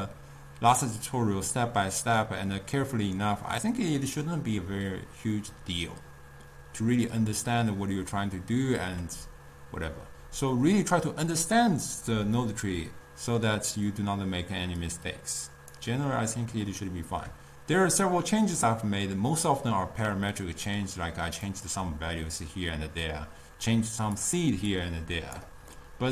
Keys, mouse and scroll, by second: 14.9 click, 16.4-21.6 middle drag, 21.6 click, 24.3 click, 24.8-25.8 drag, 25.8-26.1 middle drag.